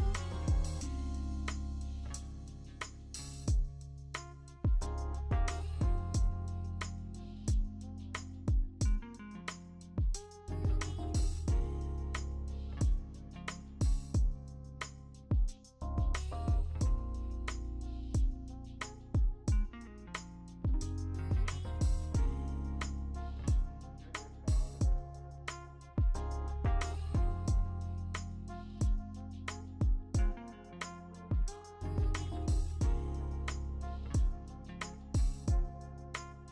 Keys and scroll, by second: 6.3 p, 6.6 p, 9.0 ctrl+z, 9.8 ctrl+z, 15.8 ctrl+z, 16.9 ctrl+z, 22.5 p, 22.8 p, 28.9 ctrl+z, 34.6 ctrl+z.